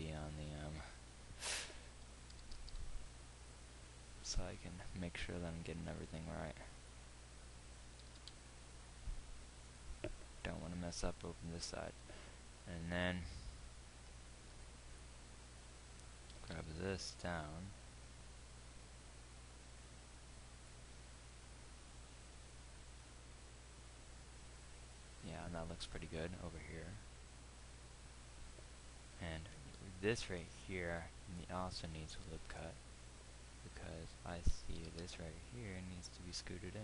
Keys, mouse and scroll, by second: 2.9 g, 8.7-12.0 drag, 8.7 g, 16.6 g, 30.3 ctrl+r, 35.1 g.